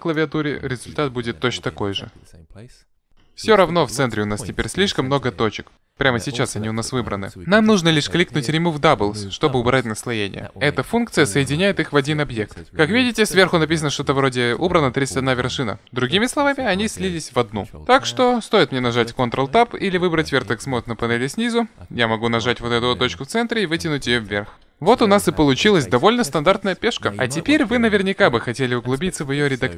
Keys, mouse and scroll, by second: 10.0-12.0 drag, 17.8 ctrl+Tab, 21.4-23.3 right drag, 22.2-23.9 drag, 24.6 KP_1.